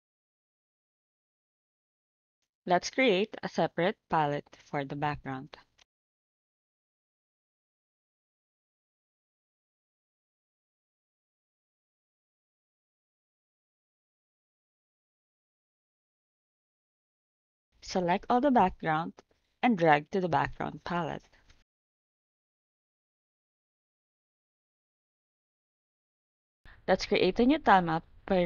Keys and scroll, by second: 6.3-8.5 typing.